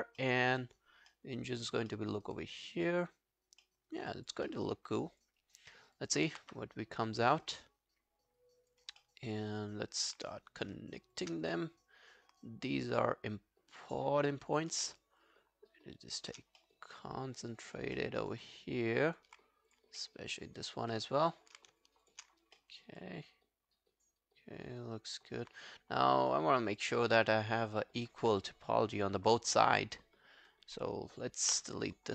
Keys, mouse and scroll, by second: 0.2 alt+middle click, 0.4 alt+right click, 0.6 alt+click, 1.1 alt+middle click, 1.5 alt+right click, 1.9 alt+middle click, 2.1 alt+right click, 2.4 alt+click, 2.9 alt+right click, 3.7 alt+middle click, 3.9 alt+right click, 4.1 alt+click, 4.5 alt+middle click, 4.8 alt+scroll down 1, 5.1 alt+click, 5.4 alt+right click, 6.0 alt+click, 6.4 q, 6.6 right click, 9.0 alt+middle click, 9.3 alt+click, 10.3 alt+click, 11.2 shift+click, 11.5 alt+click, 15.0 shift+right click, 16.6 alt+middle click, 16.9 alt+click, 18.0 alt+middle click, 18.2 alt+right click, 18.5 alt+click, 20.0 alt+middle click, 20.3 alt+click, 20.9 alt+middle click, 22.1 shift+click, 22.4 alt+scroll down 1, 22.6 alt+middle click, 23.0 alt+click, 25.8 right click, 26.9 double click, 27.2 scroll down 1, 27.4 alt+click, 31.5 ctrl+BackSpace.